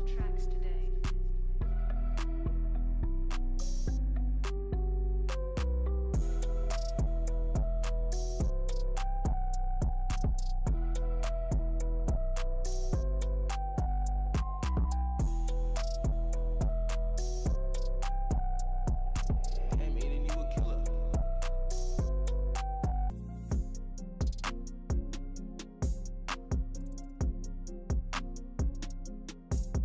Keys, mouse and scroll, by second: 0.6 w, 0.9 alt+click, 1.0 alt+scroll up 1, 1.6 click, 2.1 alt+click, 2.7 alt+right click, 2.9 alt+middle click, 3.4 alt+click, 4.2-6.9 alt+drag, 7.5 alt+click.